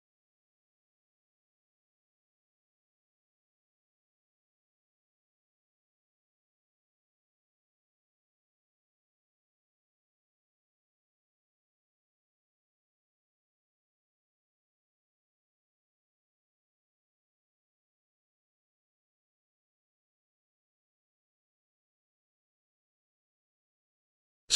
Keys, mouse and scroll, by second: 0.7-1.3 ctrl+drag, 10.4-11.1 shift+drag, 13.9-15.2 shift+drag, 17.7-18.7 drag, 20.6 space, 20.8-21.4 ctrl+drag.